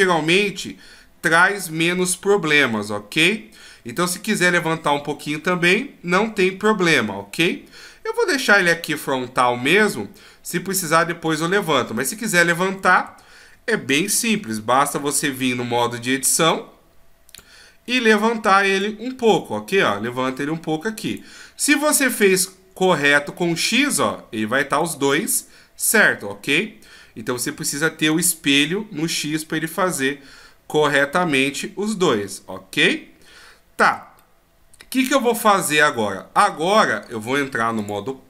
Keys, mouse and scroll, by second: 1.4 d, 12.8 a, 13.1 a, 15.2 alt+g, 17.9 click, 17.9 right click, 18.8 click, 21.9 middle click, 25.1 middle click, 26.8-27.8 scroll down 1, 27.8 d, 28.1 right click, 34.2 middle click, 37.8 click.